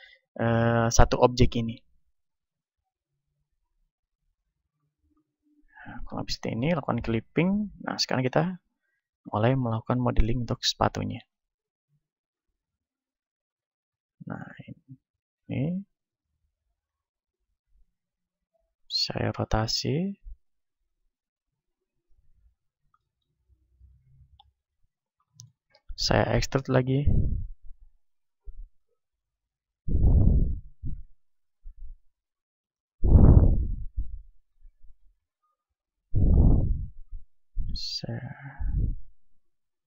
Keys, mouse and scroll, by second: 2.1 KP_1, 2.5-4.5 middle drag, 3.9-9.3 drag, 7.9-10.1 middle drag, 10.1 click, 10.1-12.4 right drag, 11.3-13.3 drag, 13.1-16.9 right drag, 16.0-18.0 drag, 17.5 a, 18.0 a, 18.9 r, 20.1-23.0 drag, 22.4-23.9 middle drag, 23.9-31.1 drag, 23.9-28.1 right drag, 24.8 middle click, 31.1 e, 32.7-38.7 drag, 33.1-37.1 right drag, 38.7 middle click, 38.7 r.